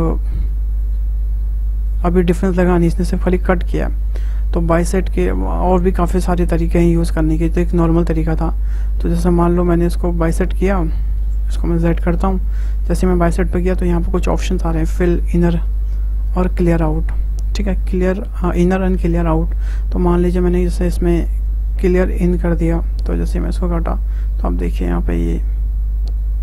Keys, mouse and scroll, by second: 0.4 `, 1.9 click, 2.3-3.5 scroll up 6, 4.0-4.3 scroll down 3, 4.6-9.7 shift+middle drag, 9.7 ctrl+z, 11.2 ctrl+z, 12.9-15.9 drag, 21.8 click, 23.0 click.